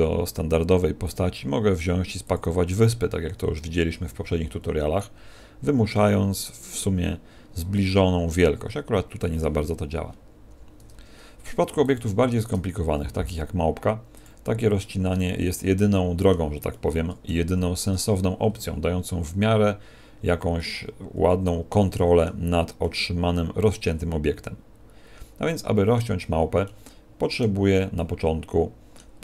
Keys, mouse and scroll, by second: 1.0 click, 3.9 t, 4.9 click, 10.7 Tab, 11.5 x, 12.2 shift+a, 15.1 middle click, 16.7 middle click, 17.4 Tab, 17.9-18.2 scroll up 4, 18.6 scroll up 2, 20.1 z, 20.5 middle click, 22.7 middle click, 26.6 middle click, 27.9 middle click.